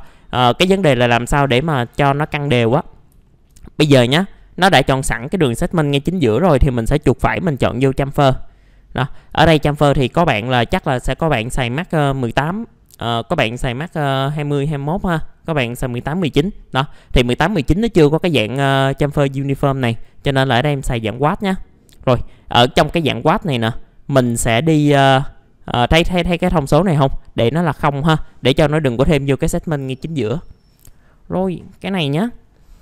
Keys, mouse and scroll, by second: 1.0-1.9 scroll up 1, 1.9 scroll down 1, 2.8 middle click, 3.2 alt+middle click, 3.9-4.4 scroll up 1, 4.4 middle click, 6.3 scroll up 1, 6.6 right click, 8.0 click, 9.0 middle click, 9.4 alt+middle click, 10.1 middle click, 16.4-16.8 scroll up 1, 16.8 middle click, 19.8 click, 22.1 middle click, 24.1-26.7 scroll up 1, 27.7 click, 28.4 middle click, 28.6-29.1 scroll down 1, 29.1 middle click.